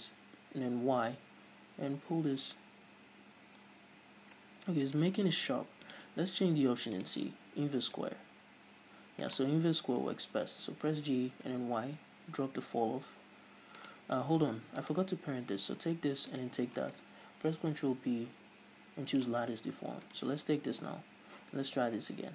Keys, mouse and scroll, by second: 5.2 right click, 6.1-9.6 drag, 9.6 right click, 10.8 g, 14.1 right click, 14.8 Tab, 15.0 right click, 16.5 shift+right click, 17.7 ctrl+p, 20.3 right click, 20.8 Tab, 22.0 g.